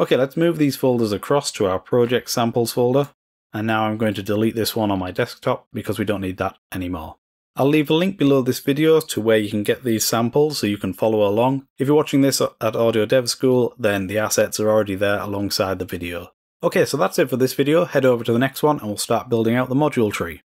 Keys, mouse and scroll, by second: 0.0-0.6 typing, 0.6 click, 1.4-3.3 drag, 3.7 click, 4.4 click, 4.9 click, 5.3 click, 7.7 click, 8.2 click.